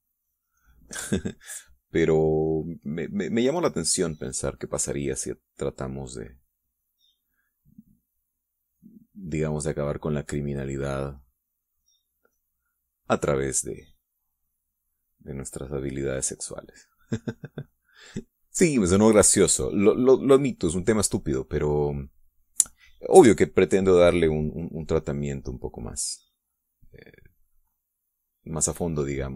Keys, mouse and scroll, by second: 6.2-11.5 drag, 14.7-18.8 drag, 24.4-29.3 drag.